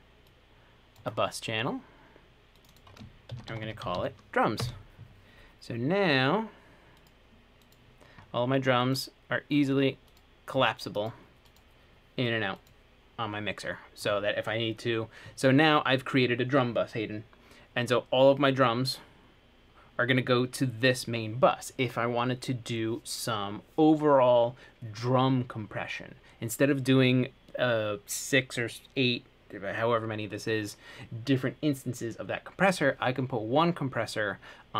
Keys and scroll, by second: 3.2-4.6 typing, 4.8 Return.